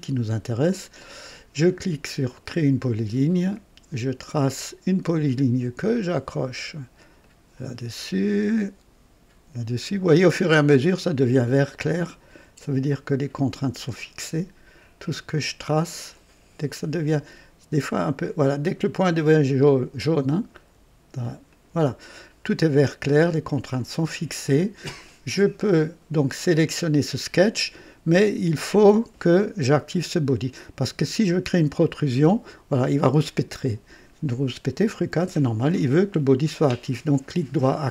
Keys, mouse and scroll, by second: 2.3 click, 4.2 click, 7.2 click, 9.8 click, 19.2 click, 21.5 click, 23.7 click, 31.8 click, 33.3 click, 36.5 right click.